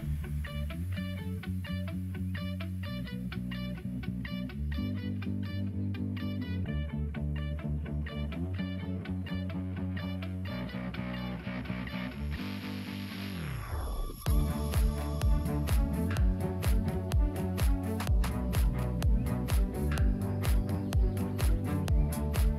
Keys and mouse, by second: 2.1 g, 4.5 alt+click, 5.6 e, 9.3 click, 13.4 g, 16.2 click, 16.4 g, 18.1 g, 20.7 alt+click.